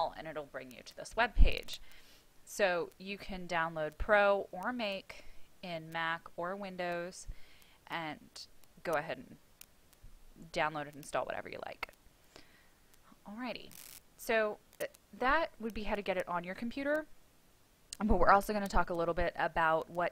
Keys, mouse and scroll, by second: 3.3 click.